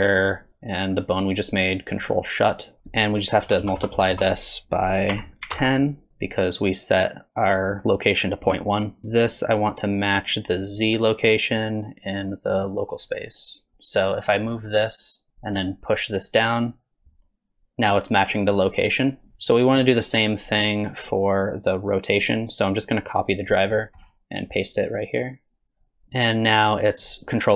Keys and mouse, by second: 3.6 BackSpace, 3.8 BackSpace, 4.1 BackSpace, 14.9 click, 16.1 click, 16.7-19.3 drag, 19.3 alt+g, 19.9 click, 21.2-21.9 drag, 22.8-23.4 drag, 24.7-25.8 drag, 26.3-27.5 drag.